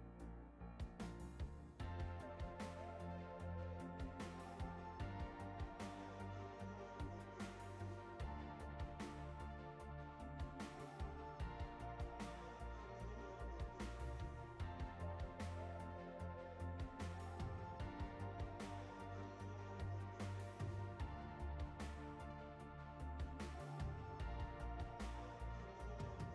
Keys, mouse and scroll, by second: 8.5-11.6 drag, 13.9 click, 16.4 click, 21.4-23.0 drag, 22.1 KP_0, 24.8 click.